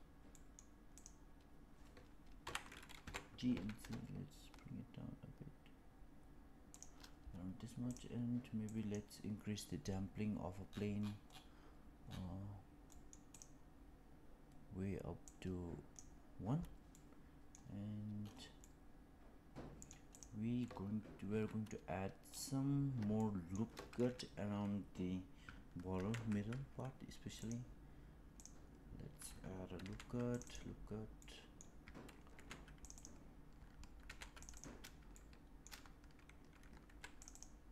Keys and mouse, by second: 0.2 middle drag, 0.8 click, 2.3 KP_1, 2.9 g, 7.8 click, 8.7 click, 12.8-13.2 middle drag, 13.2 click, 15.3 click, 16.8-17.5 middle drag, 18.5-19.8 middle drag, 20.0 click, 21.2 Tab, 23.1 shift+middle click, 25.8 ctrl+r, 29.7 ctrl+r, 31.1 middle click, 32.2 ctrl+r, 33.9 ctrl+r, 35.0 shift+middle click, 36.7 ctrl+r.